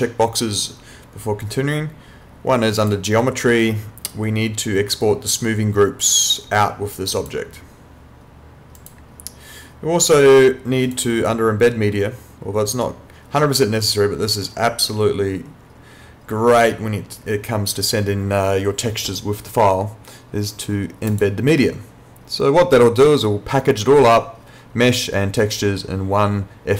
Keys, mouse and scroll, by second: 2.8 click, 7.2 click, 21.1 click.